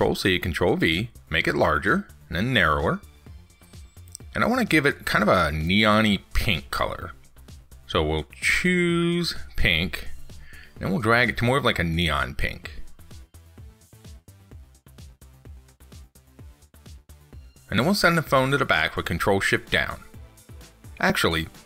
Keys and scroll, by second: 0.4 ctrl+c, 0.5 ctrl+v, 18.1 ctrl+shift+Down.